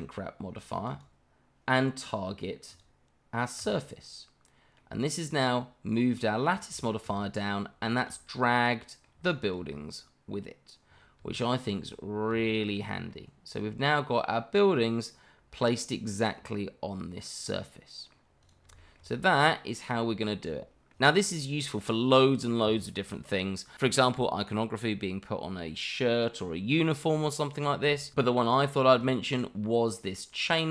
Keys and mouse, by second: 2.7 click, 3.6 click, 4.8-6.0 middle drag, 6.8 shift+middle drag, 7.8 shift+middle drag, 8.3-9.0 middle drag, 9.2-9.5 shift+middle drag, 11.3-11.7 shift+middle drag, 12.4-12.8 shift+middle drag, 13.1-18.1 middle drag, 18.4 click, 18.8 shift+middle drag, 20.2-20.9 middle drag, 21.2 shift+middle drag, 22.7 shift+middle drag, 24.3 shift+middle drag, 28.9 click, 30.4-30.7 middle drag.